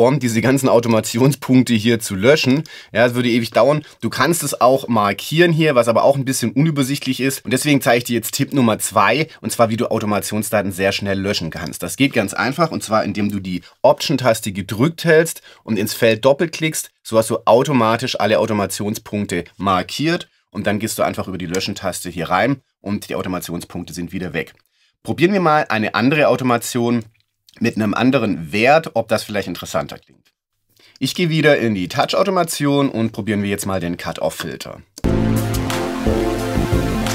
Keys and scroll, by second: 21.5 BackSpace, 35.0 space.